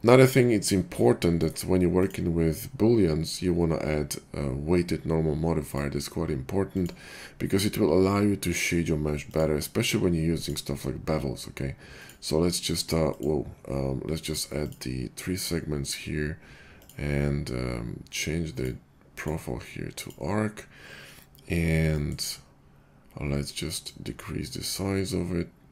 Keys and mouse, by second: 5.6-6.6 drag, 6.6 middle click, 6.9-9.2 drag, 10.4-25.7 middle drag.